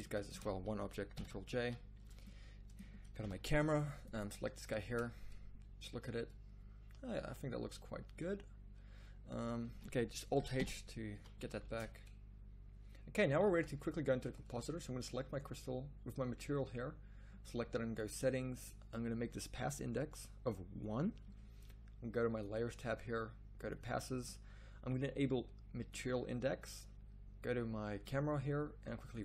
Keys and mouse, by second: 1.1 ctrl+j, 1.6 a, 3.2 KP_0, 5.0 shift+z, 9.5 z, 9.6 z, 10.5 alt+h, 11.1 a, 11.8 shift+z, 13.5 z.